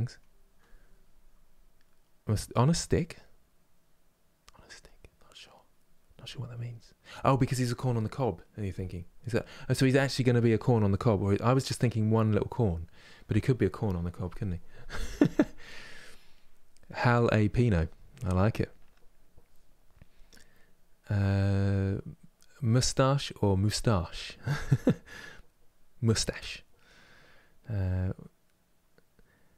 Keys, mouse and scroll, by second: 0.0-29.5 ctrl+middle drag.